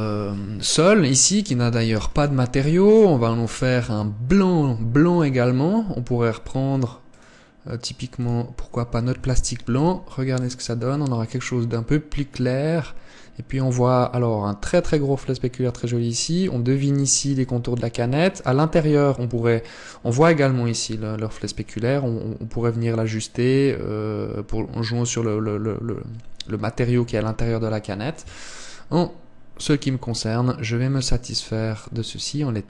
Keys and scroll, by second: 2.1 Escape.